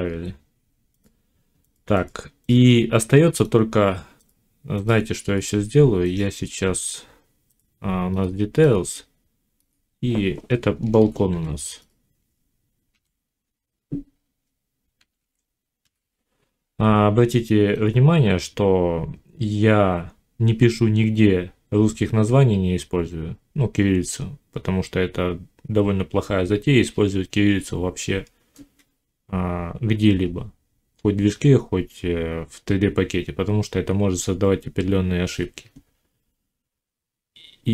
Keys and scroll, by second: 10.8 shift+b, 11.2 a, 12.8 l, 14.9 k.